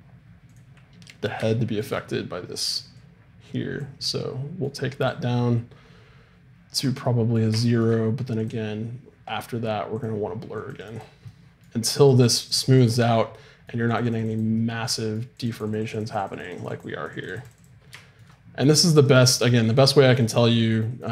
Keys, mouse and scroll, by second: 1.3-2.6 middle drag, 3.0-4.9 drag, 5.1-6.8 drag, 8.4-15.6 drag, 14.5 middle click, 14.7 middle click, 17.8-21.1 drag, 18.0 right click.